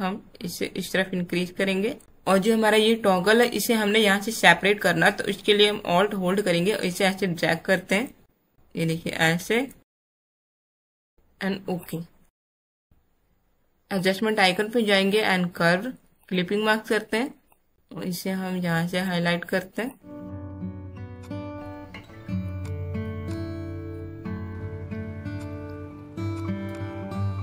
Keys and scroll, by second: 12.8 space.